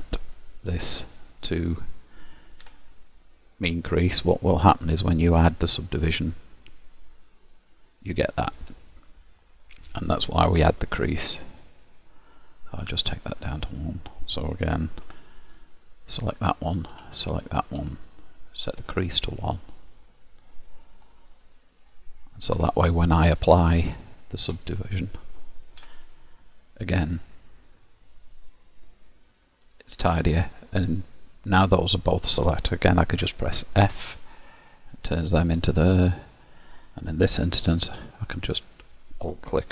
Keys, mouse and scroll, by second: 2.8 Tab, 5.0 click, 8.6 middle click, 10.7 Tab, 13.0 click, 15.2 3, 15.6 click, 16.4 middle click, 17.3 shift+click, 18.7 click, 21.2 middle click, 22.7 Tab, 24.6 click, 26.0 Tab, 27.0 middle click, 30.4-31.2 scroll down 1, 31.2 middle click, 33.3 f, 34.0 middle click, 36.2-36.9 scroll up 4, 36.9 scroll up 1, 37.5 2, 38.7 alt+click.